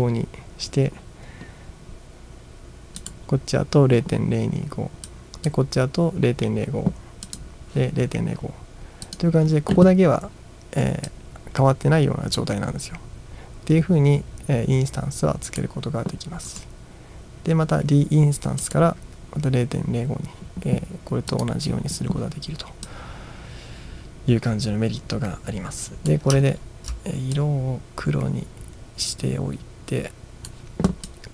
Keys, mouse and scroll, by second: 3.0 click, 5.1-5.5 drag, 7.3 click, 9.1 click, 11.1-15.6 drag, 16.5 right click, 18.6 click, 21.3 click, 21.8 click, 22.9-26.1 drag, 26.5-26.9 ctrl+scroll down 1, 27.4-30.5 drag, 31.1-31.3 drag.